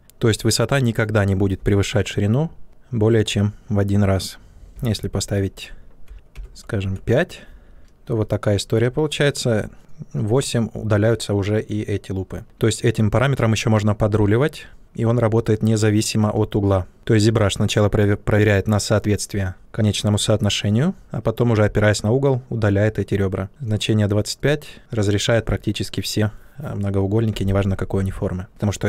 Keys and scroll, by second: 4.7 2, 6.0 BackSpace, 6.3 5, 6.8 Return.